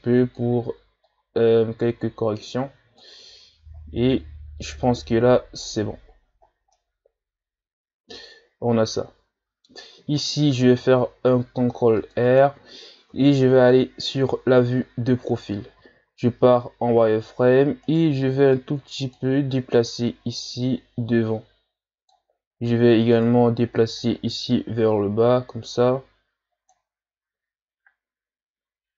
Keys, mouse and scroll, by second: 3.8-4.8 shift+scroll down 2, 5.0 z, 6.0-6.5 shift+scroll up 4, 6.5 scroll down 2, 6.7-9.8 middle drag, 10.8 ctrl+r, 13.1 KP_3, 14.7-15.4 scroll up 1, 15.8 z, 17.9 right click, 18.1 b, 19.9-22.5 drag, 22.5-23.1 scroll up 2, 23.1 right click, 24.0-27.0 drag.